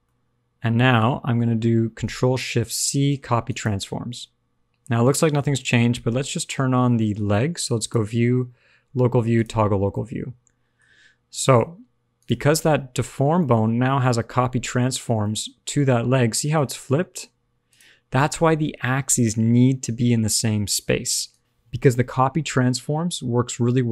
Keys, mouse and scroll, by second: 0.0 middle click, 2.7 ctrl+shift+c, 5.1 middle click, 6.9 middle click, 7.7 click, 9.9 middle click, 10.7-11.4 scroll up 2, 11.4 middle click, 12.1 click, 13.3 middle click, 14.9 click, 15.1 middle click, 17.6 click, 19.2 click, 21.2 click.